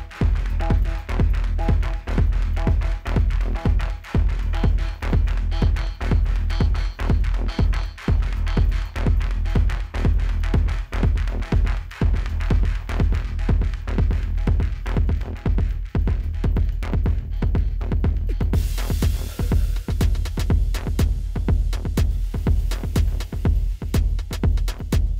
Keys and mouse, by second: 0.1-0.4 typing, 0.9 click, 2.4-2.8 typing, 4.3 click, 5.5 click, 8.1 right click, 10.2 click, 16.8 right click, 18.6 click, 20.4 ctrl+=, 22.0 click, 24.0 typing, 24.7 right click.